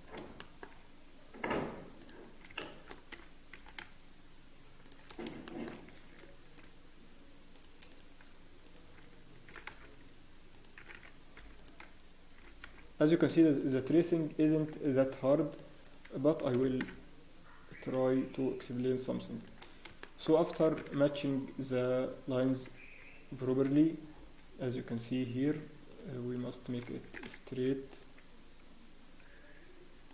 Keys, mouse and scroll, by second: 0.0 scroll up 1, 0.3 shift+middle click, 0.7-1.6 scroll up 2, 2.0 click, 2.0 scroll up 1, 2.6 shift+middle click, 3.1 g, 5.1 scroll down 1, 5.4 shift+middle click, 5.7 scroll down 1, 6.2 ctrl+r, 6.2 scroll down 1, 7.9 click, 7.9 scroll up 1, 8.6 shift+click, 9.5 e, 10.8 s, 14.7 ctrl+r, 15.8 click, 16.5 g, 19.7 scroll down 1, 20.0 shift+middle click, 20.5 scroll down 3, 20.5 e, 22.6-23.4 scroll down 5, 23.1 Tab, 23.4 scroll up 1, 23.5 Tab, 23.5-23.9 scroll down 1, 24.1 scroll up 5, 24.8 click, 25.4 shift+click, 26.7 click, 27.0 s, 29.2 z.